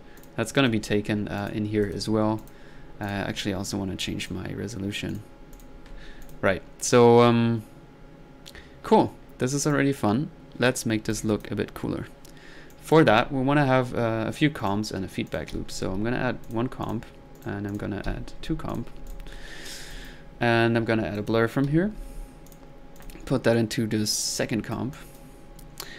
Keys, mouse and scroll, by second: 0.2 click, 0.6 middle drag, 1.4 click, 1.8 middle click, 2.4 click, 3.1 click, 4.2 click, 4.6 click, 5.1 click, 5.6 drag, 6.2 click, 9.7 click, 12.7 click, 13.3-13.8 middle drag, 14.6 right drag, 15.3-15.6 drag, 15.6 c, 16.5 click, 16.9 drag, 17.4 right drag, 17.7 click, 18.6 c, 18.7 click, 19.1 click, 19.7 middle click, 19.9-20.3 drag, 21.2 middle click, 21.8 b, 22.5 click, 23.0-23.4 drag, 23.6-25.3 drag, 25.8 click.